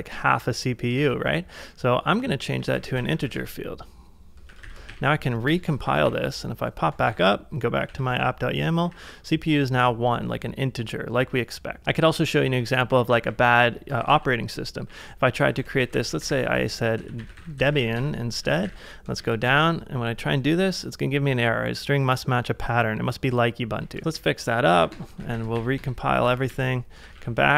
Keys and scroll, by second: 1.1 ctrl+c, 1.3-4.6 typing, 4.5 ctrl+a, 4.9 Up, 5.4 Return, 5.9 ctrl+a, 6.9-9.0 typing, 8.0 ctrl+a, 12.0-18.6 typing, 18.5 ctrl+a, 19.2 Up, 19.5 Return, 24.0 ctrl+a, 24.1 ctrl+a, 24.5-25.9 typing, 26.3 ctrl+a, 26.5 ctrl+a, 27.1 ctrl+a, 27.1 ctrl+l.